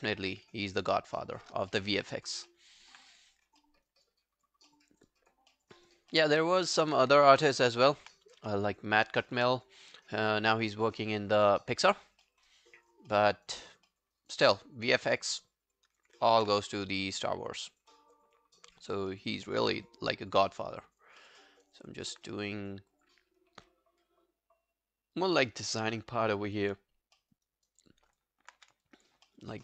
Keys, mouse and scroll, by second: 0.8 shift+click, 1.4 shift+click, 1.7 alt+middle click, 2.0 alt+right click, 2.2 alt+click, 2.5 alt+middle click, 2.7 alt+right click, 3.6 alt+middle click, 3.9 alt+right click, 4.2 alt+click, 4.7 alt+middle click, 4.9 alt+right click, 5.1 alt+click, 5.5 alt+middle click, 5.7 alt+right click, 6.1 alt+middle click, 7.7 ctrl+e, 12.3 alt+middle click, 12.5 alt+right click, 12.8 alt+click, 13.1 alt+middle click, 13.4 alt+right click, 13.6 alt+click, 13.9 alt+middle click, 14.2 alt+right click, 16.3 ctrl+z, 20.6 alt+click, 21.2 alt+middle click, 21.5 alt+right click, 21.8 alt+click, 25.5 alt+middle click, 25.8 alt+scroll down 1, 26.1 alt+click, 27.2 alt+middle click, 27.5 alt+right click, 27.8 alt+click, 28.6 q, 28.9 alt+click, 29.3 alt+middle click, 29.5 alt+right click.